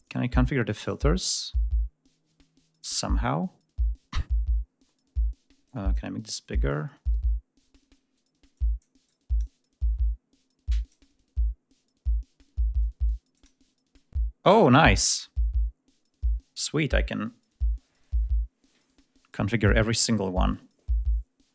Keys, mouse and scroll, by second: 5.5 click, 8.3 click, 8.8 click, 10.5 click, 13.1 click, 21.3 click.